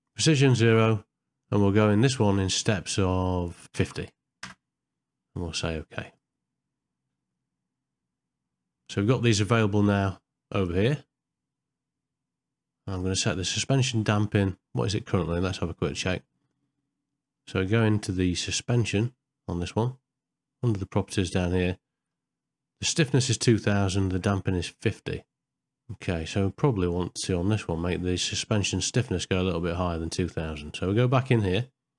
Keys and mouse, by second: 12.9-16.1 drag.